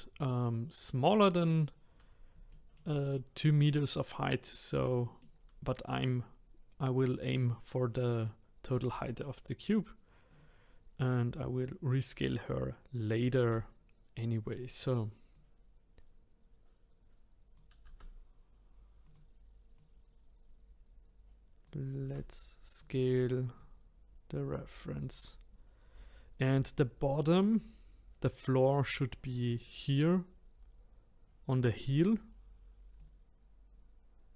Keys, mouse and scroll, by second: 2.5-4.1 shift+middle drag, 4.1-4.6 scroll up 3, 4.9-7.9 shift+middle drag, 8.8 s, 11.2 click, 13.4 s, 15.3 click, 17.8 s, 19.7 click, 22.0 s, 23.6 click, 33.0 click.